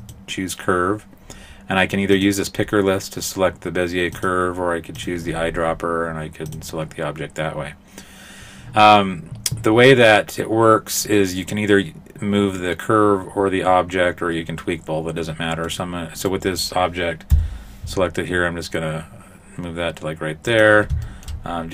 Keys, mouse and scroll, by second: 5.0 click, 15.7 right click, 16.3 right click, 17.3 g, 21.1 shift+middle click.